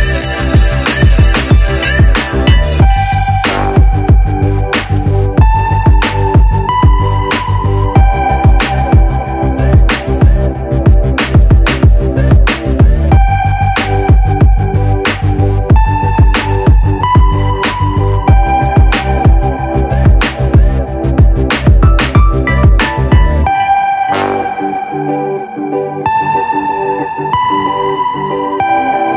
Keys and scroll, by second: 12.4 Return, 18.9 v.